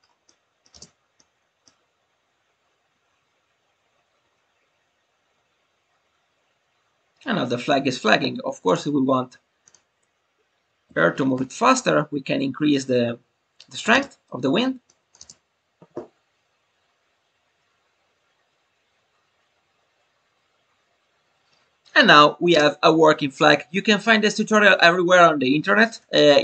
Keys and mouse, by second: 0.2-0.6 middle drag, 1.2-1.6 middle drag, 1.2 space, 8.6-12.0 drag, 14.8 click.